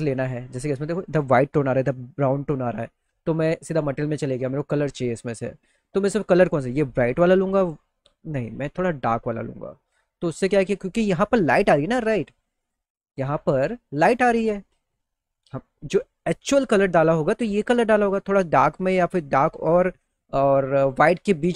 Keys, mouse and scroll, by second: 3.4 click, 9.2 click, 12.1 click, 13.4 click.